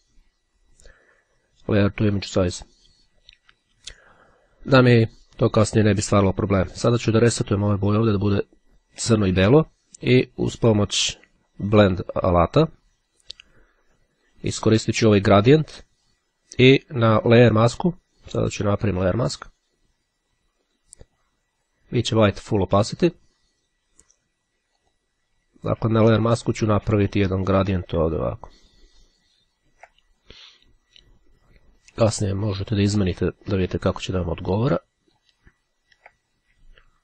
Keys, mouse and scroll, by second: 2.3 click, 3.7 click, 7.0-8.4 drag, 13.3 click, 17.5 click, 18.5 right click, 20.8 click, 22.8 click, 24.9 click, 27.3-28.8 ctrl+drag, 31.7-33.7 ctrl+drag, 34.5-35.8 drag.